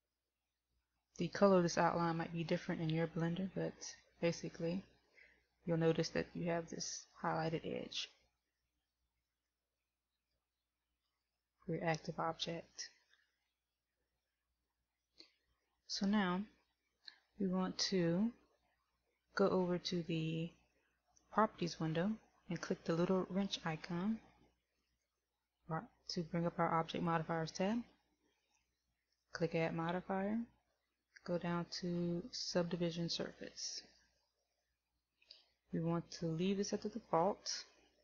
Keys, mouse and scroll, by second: 9.3 right click, 10.6 right click, 11.1 right click, 11.6 right click, 25.1 click, 29.8 click.